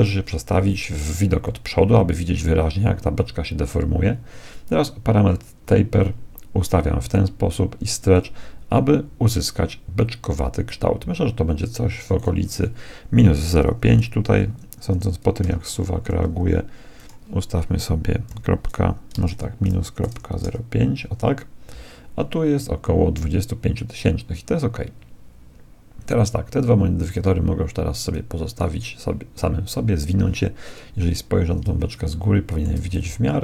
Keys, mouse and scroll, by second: 1.6-3.4 middle drag, 5.4-7.2 drag, 8.1-9.8 drag, 12.1-13.9 drag, 17.0-18.9 drag, 27.1-29.8 drag, 30.9 KP_7, 32.1-33.4 middle drag, 33.0 z.